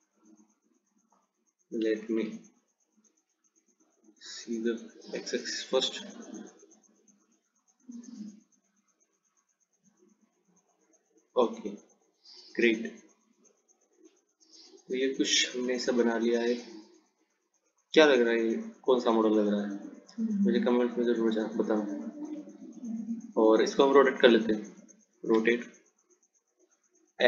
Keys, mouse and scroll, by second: 2.3 ctrl+z, 4.0 click, 6.9 click, 13.1 click, 22.5 Tab, 24.5 r.